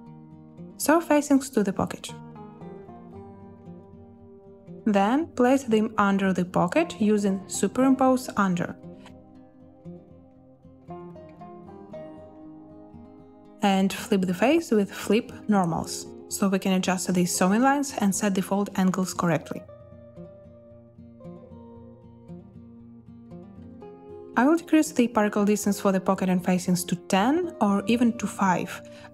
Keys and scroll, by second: 1.0 n, 4.9 a, 22.8 2.